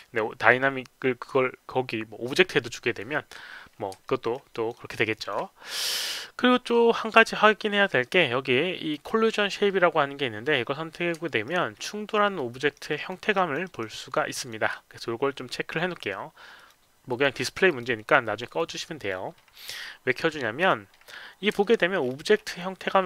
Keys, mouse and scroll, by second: 4.1 alt+middle click, 4.5 alt+click, 5.1 alt+click, 8.9 click, 11.2 alt+middle click, 11.7-12.0 alt+scroll up 1, 12.2 alt+middle click, 12.6 alt+right click, 12.9 alt+middle click, 13.3 alt+click, 13.6 alt+right click, 14.0 alt+middle click, 14.3 alt+click, 16.6 click, 17.1 click, 17.7 click, 18.5 click, 19.0 click, 20.6 click, 21.6 alt+middle click, 22.0-22.6 alt+scroll up 1, 22.6 alt+click.